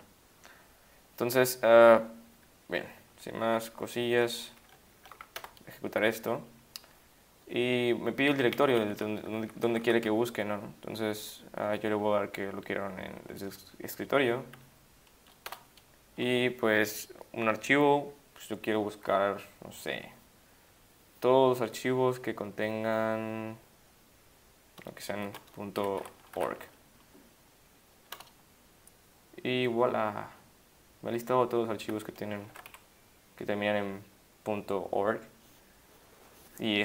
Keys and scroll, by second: 5.4 Return, 8.6 Down, 8.7 Down, 8.8 Down, 8.9 Down, 9.4 Up, 9.6 Up, 9.7 Up, 9.8 Up, 15.5 Return, 25.1-26.9 typing, 28.2 Return, 32.4 ctrl+x, 32.7 1.